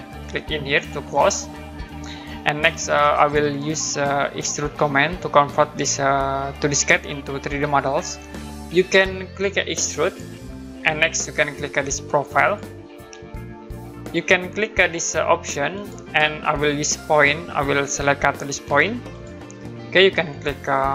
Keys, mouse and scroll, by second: 1.1 click, 2.2 middle click, 2.9 click, 3.6 right click, 6.4-7.2 scroll up 1, 7.2-7.6 scroll down 1, 7.6 middle click, 10.0 click, 12.4 click, 15.7 click, 19.1 click.